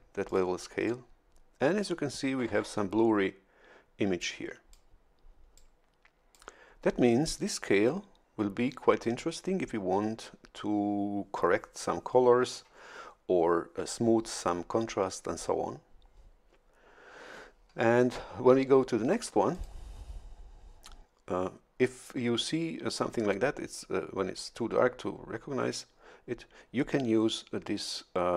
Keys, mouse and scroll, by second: 0.2 click, 4.2 click, 5.5 click, 19.5 click.